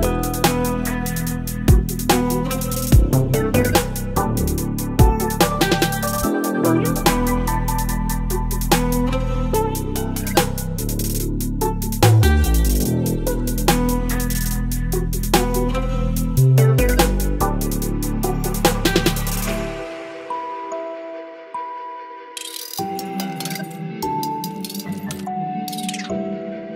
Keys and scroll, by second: 3.9 v, 6.9 ctrl+t, 13.8 Return, 18.4 Delete, 22.9 Delete, 23.8 v, 24.4 Right, 24.7 Right, 24.9 Right, 25.1 Right.